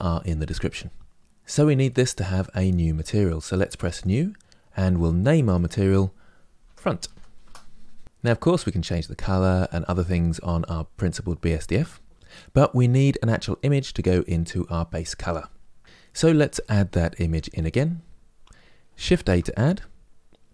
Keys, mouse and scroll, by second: 1.2-1.6 scroll up 3, 1.6-3.8 middle drag, 3.8 click, 7.1-20.5 drag.